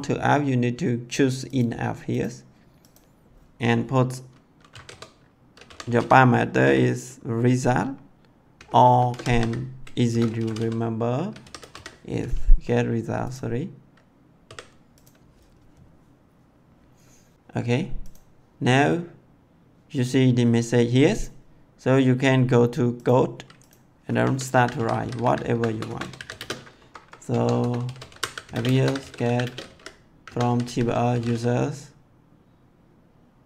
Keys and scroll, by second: 4.4-6.5 typing, 8.5-12.7 typing, 14.4 s, 24.1 Caps_Lock, 24.2-31.6 typing, 27.2 Tab.